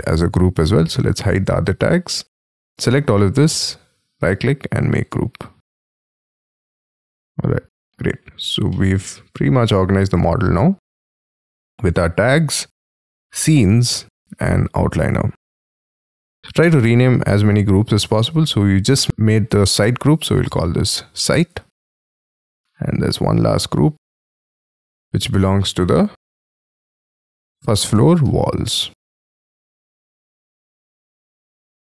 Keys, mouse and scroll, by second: 1.2 double click, 1.7-3.1 scroll down 8, 3.1 scroll up 5, 4.1 right click, 6.4 double click, 6.9 double click, 7.2 double click, 7.6 double click, 7.9 double click, 8.4 scroll up 5, 8.6 middle click, 10.8 scroll up 4, 16.4 scroll up 6, 18.0 double click, 20.4-22.0 typing, 27.4-29.3 typing, 29.6 Return.